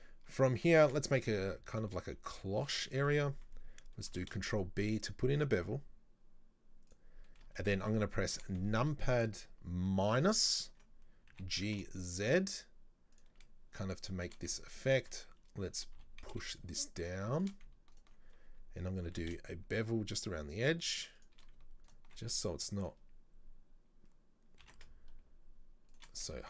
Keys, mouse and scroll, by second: 3.0-4.2 shift+middle drag, 3.2-4.2 scroll up 1, 4.2 ctrl+b, 7.3 shift+middle click, 7.6-8.0 scroll up 1, 8.0-10.1 shift+middle drag, 10.1 ctrl+KP_Subtract, 11.4 g, 14.2 shift+middle click, 14.9 alt+right click, 16.0 g, 18.0 alt+right click, 19.1 ctrl+b, 21.9 alt+right click, 24.7 ctrl+b, 26.3 scroll down 3.